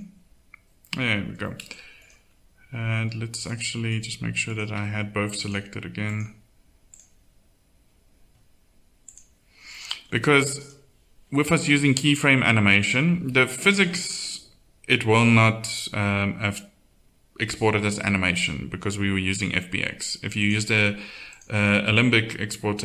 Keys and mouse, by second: 1.0 middle click, 3.1 middle click, 20.4-22.8 drag.